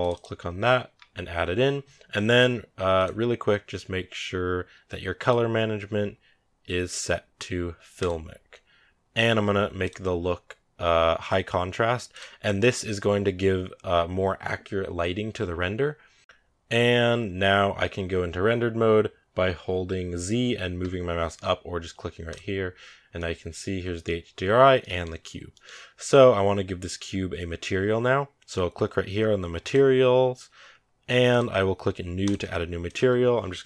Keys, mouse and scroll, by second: 0.0 click, 7.9-17.3 drag, 17.3 scroll down 1, 19.2-20.7 scroll down 1, 20.8 z, 22.1 click, 22.7 scroll down 1, 23.0-29.5 middle drag, 29.5-33.6 drag.